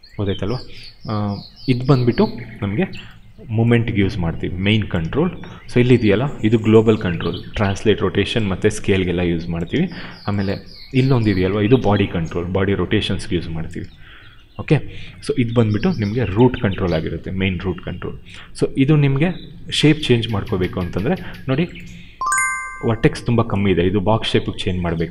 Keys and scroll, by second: 4.9 ctrl+z, 7.9 r, 9.6 ctrl+z, 11.6 e, 13.7 ctrl+z, 14.2 q, 14.5 w.